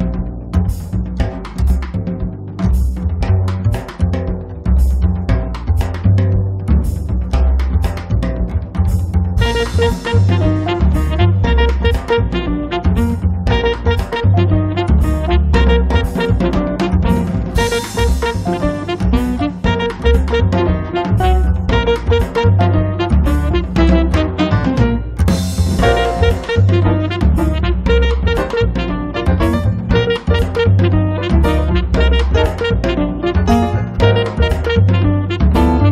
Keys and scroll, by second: 1.3 space, 3.3-6.7 typing, 7.2 Escape, 8.8 p, 10.4 2, 10.8 Return, 11.2 space, 12.5 f, 14.3-16.1 typing, 17.3 p, 18.7 space, 19.3 Escape, 25.1 r, 28.3 p, 29.5 space, 34.3 space, 35.2 Escape.